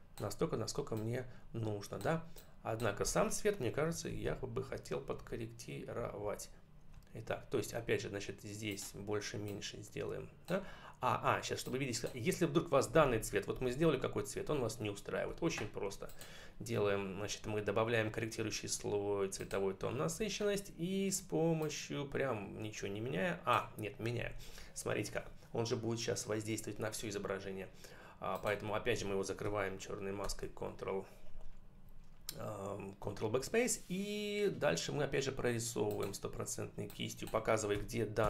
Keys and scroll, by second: 3.9 ctrl+-, 5.8 ctrl+=, 13.5 ctrl+=, 30.1 ctrl+BackSpace, 37.6 1, 38.1 0.